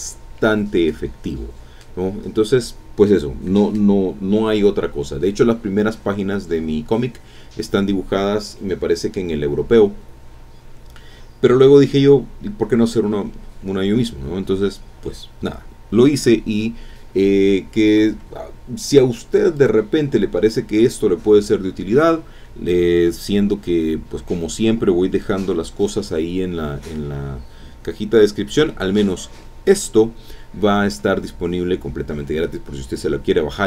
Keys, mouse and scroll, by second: 18.9 click, 19.5 click, 20.5 click.